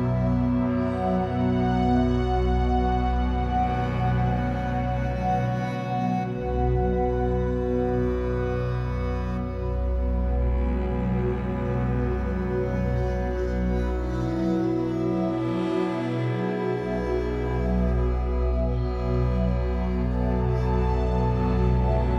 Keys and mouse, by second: 0.5 typing, 3.0 click, 3.7 click, 4.1 click, 4.6 click, 6.4 alt+click, 7.9 click, 8.6 click, 9.2 click, 10.3 alt+click, 14.3 click, 14.4 typing, 15.9 space, 16.7 space, 18.8 click, 21.3 alt+click.